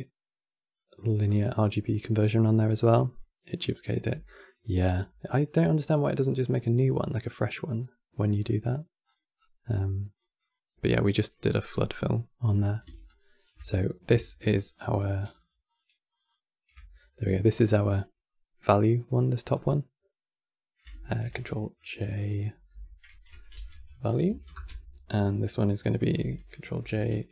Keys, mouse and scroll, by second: 3.4-3.7 drag, 3.7 g, 7.3 click, 8.1-8.7 middle drag, 8.7 click, 9.1-10.2 drag, 12.1-12.9 middle drag, 12.9-14.5 ctrl+shift+click, 14.3 ctrl+shift+click, 15.2 ctrl+shift+click, 15.9 ctrl+shift+click, 16.0 ctrl+shift+click, 16.8-19.2 middle drag, 19.2 click, 20.9 ctrl+j, 21.5 click, 22.4 F2, 25.3 drag, 26.3 ctrl+j, 27.0 click.